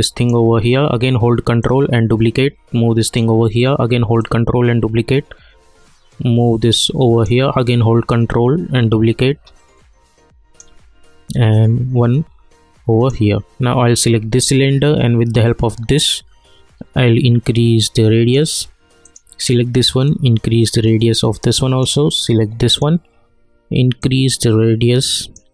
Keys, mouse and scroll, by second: 1.6-4.2 ctrl+drag, 4.2-8.1 ctrl+drag, 8.1-15.8 ctrl+drag, 15.9-25.5 drag.